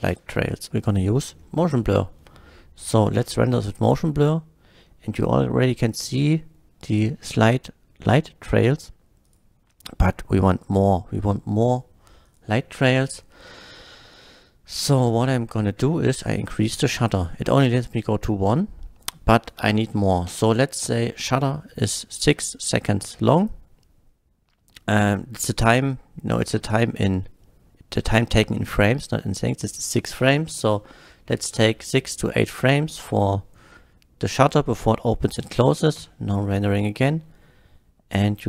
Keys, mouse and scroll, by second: 0.1 space, 0.8 click, 1.4 KP_0, 3.1 F12, 5.1 middle click, 9.3 click, 12.3 click, 14.9 click, 16.6-17.3 drag, 18.1 click, 20.3 KP_6, 20.8 Return, 20.9 KP_6, 29.4 click, 30.5 KP_8, 30.9 Return, 31.1 KP_8, 36.1 F12.